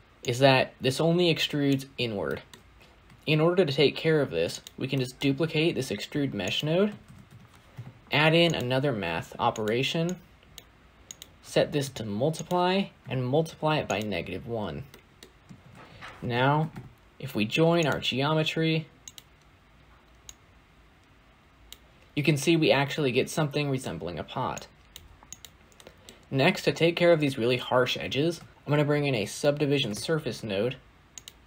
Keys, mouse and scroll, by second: 0.2-3.4 drag, 3.4 ctrl+shift+d, 8.5 shift+a, 11.7-17.8 drag, 17.8 shift+a, 21.6 click, 22.0-25.9 middle drag, 25.9-27.0 scroll up 3, 27.0-27.7 scroll up 1, 27.7-28.5 scroll up 1, 28.5-29.6 scroll up 1.